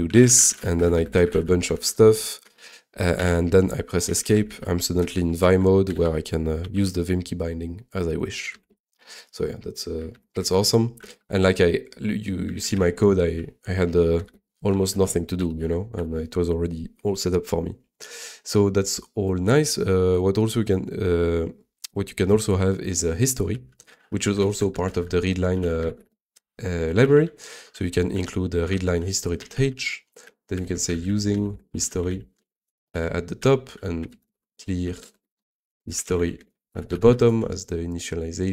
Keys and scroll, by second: 2.4 h, 3.1 Escape, 3.8-6.7 typing, 8.6 super+d, 10.1 ctrl+c, 11.1 ctrl+l, 12.5 ctrl+a, 12.7-14.2 typing.